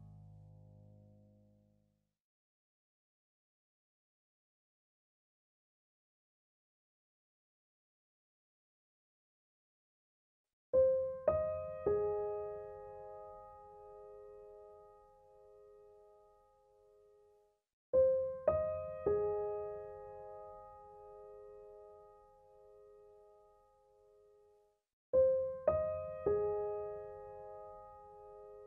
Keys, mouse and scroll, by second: 0.2 space, 0.4 click, 0.7 space, 2.0-3.7 drag, 3.8 space, 4.0 click, 5.1 click, 6.1 ctrl+z, 6.5-8.4 drag, 8.4 space, 8.6 click, 8.9 space, 9.9-14.4 drag, 14.4 space, 14.5 click, 14.9 space, 19.3 space, 19.4 ctrl+-, 22.1 click, 22.6-27.7 typing, 22.7 click, 28.0-28.6 drag.